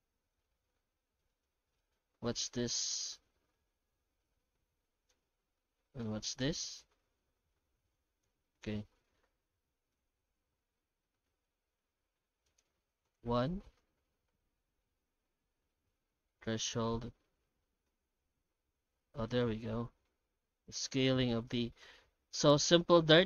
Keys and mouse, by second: 1.0 middle click, 1.8 middle click, 2.9-5.1 drag, 6.0-8.2 drag, 8.6 middle click, 9.6 middle click, 10.7 middle click, 12.5 click, 14.9 middle click, 15.6 middle click, 16.4-21.0 shift+drag, 22.1 ctrl+middle click.